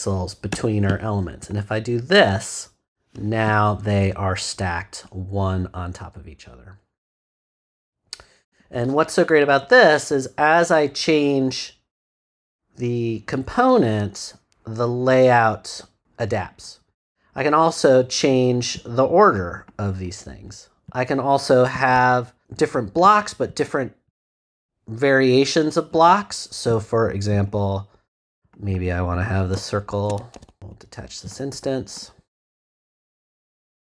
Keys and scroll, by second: 0.5 Return, 30.3 shift+super+z.